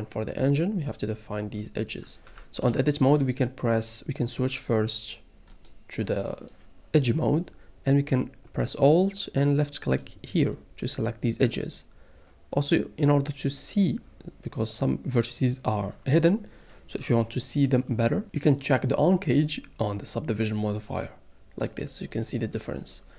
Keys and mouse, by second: 2.3 Tab, 2.9 shift+middle click, 9.8 alt+click, 20.8 click, 21.7 click, 22.1 click.